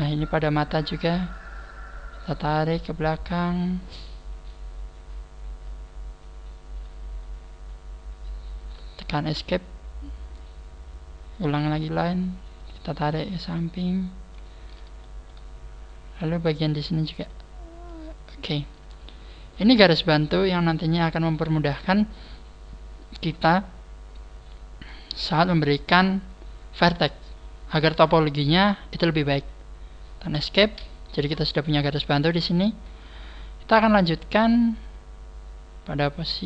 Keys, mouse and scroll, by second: 4.9 scroll down 2, 7.5-9.2 scroll down 1, 9.3 scroll down 1, 11.4 click, 11.5 click, 15.0 shift+middle click, 18.8 scroll down 2, 19.7 scroll down 1, 20.7 scroll up 4, 22.3-22.9 scroll down 1, 30.7 scroll down 5, 31.3 scroll up 3, 32.7 scroll up 2, 34.0-35.6 scroll down 1, 36.3 right click.